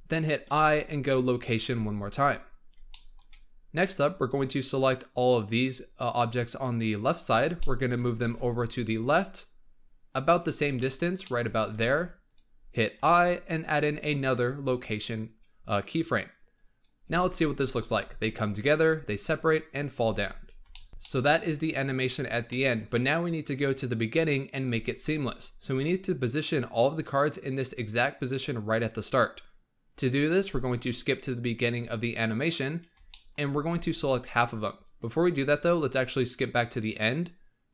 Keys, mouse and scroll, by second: 0.4 i, 2.8-4.1 shift+middle drag, 4.1 click, 4.8 click, 7.5 shift+middle click, 8.1 g, 10.3-10.7 scroll down 1, 10.7 shift+middle click, 11.6 g, 12.9 i, 16.4-16.9 drag, 16.9 space, 17.2-17.8 scroll down 3, 17.8 z, 18.1-19.9 middle drag, 19.9 space, 20.1-20.6 scroll up 4, 20.6 shift+middle click, 20.9 scroll down 1, 20.9-29.1 shift+middle drag, 30.7-32.7 drag, 32.7 scroll up 2, 33.0 shift+middle click, 33.7 alt+a, 36.0-37.7 drag.